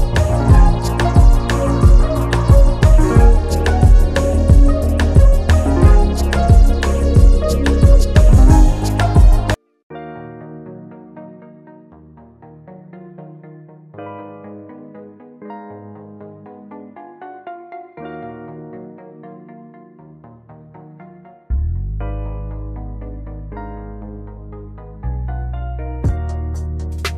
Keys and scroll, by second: 0.2 space, 5.6 ctrl+z, 10.5 space, 12.9 space, 24.5 space.